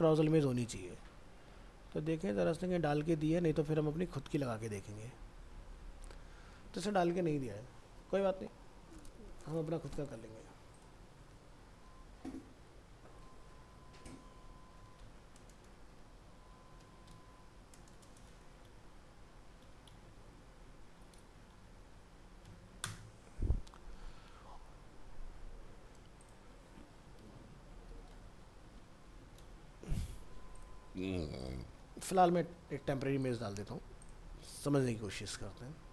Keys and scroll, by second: 31.7 ctrl+c.